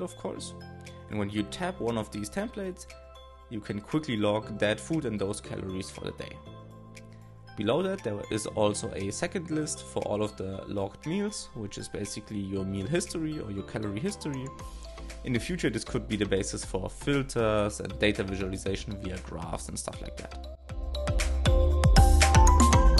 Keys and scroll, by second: 2.1-3.5 typing, 5.1 shift+s, 10.4 ctrl+Tab, 13.6 shift+l, 21.4 super+c, 21.5 shift+b.